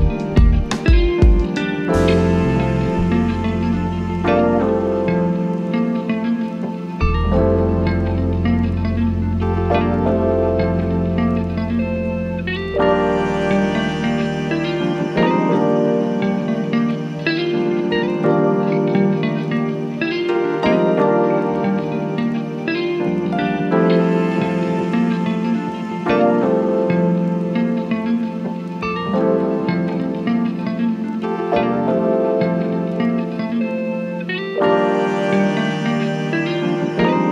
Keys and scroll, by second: 3.2 ctrl+z, 12.5 p, 15.6 ctrl+z, 15.9 1, 17.5 p, 18.2 3, 19.5 ctrl+z, 22.9 3, 32.7 c, 35.3 c.